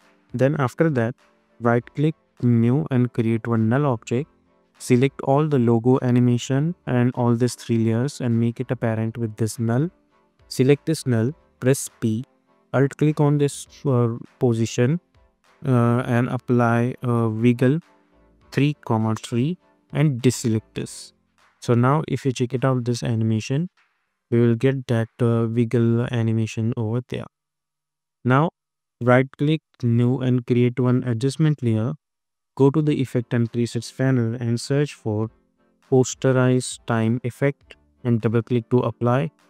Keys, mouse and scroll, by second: 0.3 click, 0.8 u, 1.4 right click, 2.3 click, 6.6 shift+click, 8.5-10.4 drag, 11.6 p, 12.9 alt+click, 15.8-19.5 typing, 17.6 Return, 20.2 click, 21.4 space, 27.9 space, 28.9 right click, 29.8 click, 32.8 ctrl+a, 35.0-36.1 typing, 37.4 click.